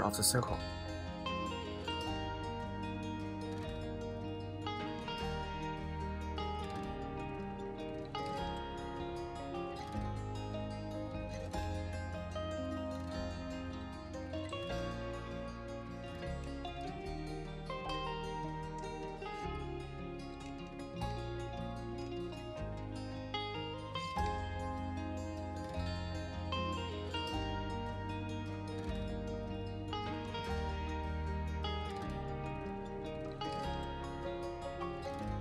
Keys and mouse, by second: 0.2 shift+z, 1.0 click, 1.3 r, 1.5 z, 3.6 shift+d, 3.9 shift+z, 5.3 r, 5.4 z, 6.8 click, 7.3-8.1 middle drag, 8.2 middle click, 8.5 middle click, 9.9-10.6 middle drag, 11.1 shift+d, 11.4 shift+z, 12.7 click, 13.2 z, 15.1-16.5 middle drag, 16.9 z, 18.3-19.6 middle drag, 20.3-20.7 middle drag, 21.7 shift+drag, 22.2 shift+d, 22.7 shift+z, 24.6 click, 25.7 r, 25.9 z, 28.0 click, 28.3-29.0 middle drag, 30.2 g, 30.6 shift+z, 31.5 r, 31.7 z, 32.7-34.4 middle drag, 34.5 middle click, 35.3 shift+d.